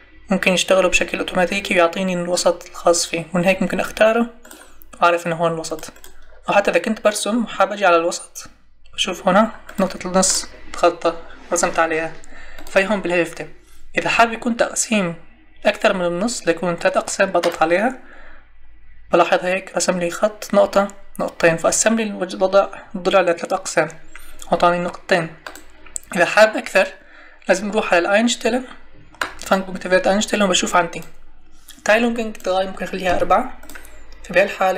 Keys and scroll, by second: 33.1 4.